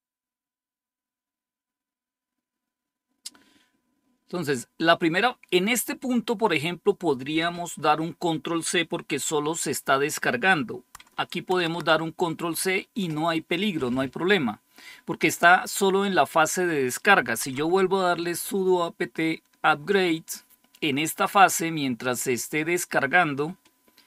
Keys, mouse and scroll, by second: 10.9-11.5 scroll down 1, 11.5 ctrl+c, 17.3 Up.